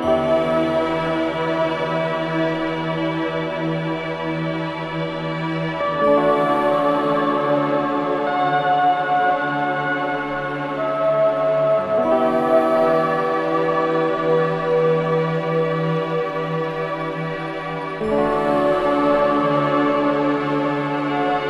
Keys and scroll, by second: 11.3 space, 17.9 space, 19.9-21.4 typing.